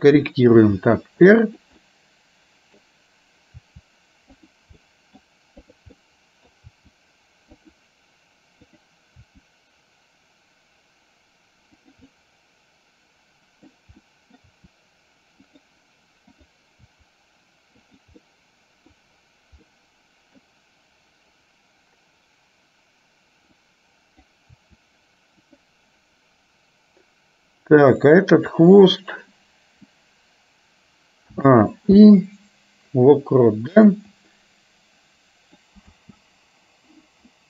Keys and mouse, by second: 0.6 r, 1.9-3.0 middle drag, 5.0 middle click, 5.6 click, 6.1 middle click, 7.0 r, 8.7 click, 9.2 r, 12.1-13.9 middle drag, 14.1 middle click, 14.5 r, 16.4 click, 17.0 r, 18.4 middle click, 19.7 middle click, 23.9 click, 24.9 r, 28.0 click, 32.2 i, 34.4-35.9 drag, 36.1 space.